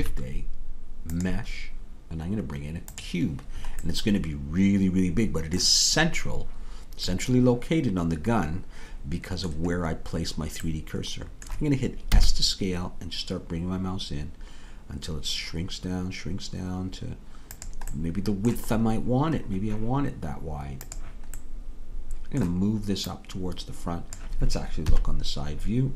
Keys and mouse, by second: 3.9-5.9 middle drag, 7.3 middle click, 12.2 s, 18.2-20.9 middle drag, 21.4-23.2 middle drag, 24.9 KP_3.